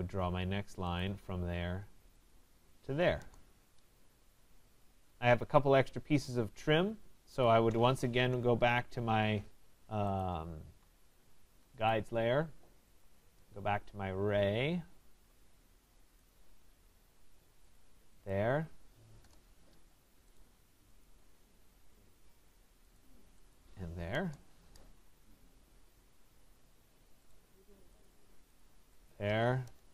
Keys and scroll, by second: 3.2 Return, 7.2 Escape, 19.2 Return, 29.6 Return.